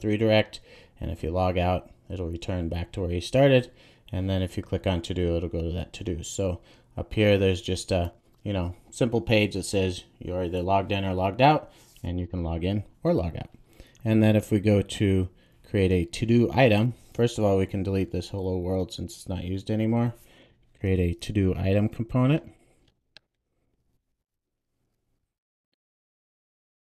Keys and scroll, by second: 18.1 Delete, 21.5 super+n, 26.4 Return.